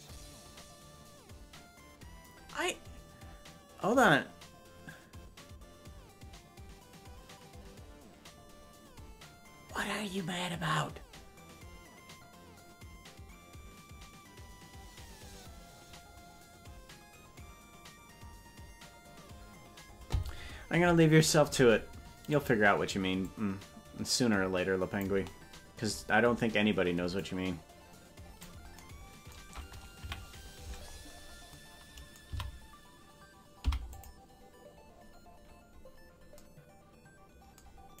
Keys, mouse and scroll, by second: 22.3 click, 23.2-25.0 drag, 27.1-28.4 drag, 29.9 KP_Decimal, 30.5 scroll down 7, 30.8-31.4 scroll up 2, 31.4 scroll down 1, 32.3 a, 33.6 i.